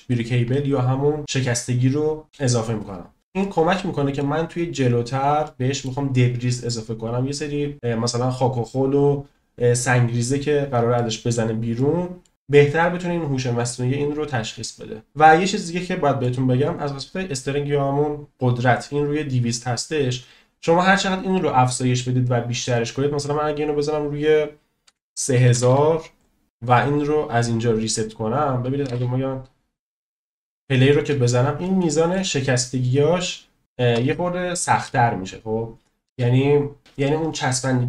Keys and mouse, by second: 0.1-2.2 drag, 3.4-4.1 middle drag, 5.4-5.8 middle drag, 10.9 middle click, 11.8 middle click, 15.2-16.2 shift+middle drag, 23.9-26.2 drag, 25.5 0, 25.7 0, 27.4-28.4 drag, 28.8 space, 30.9 middle click, 31.7-32.3 shift+middle drag, 33.8 space.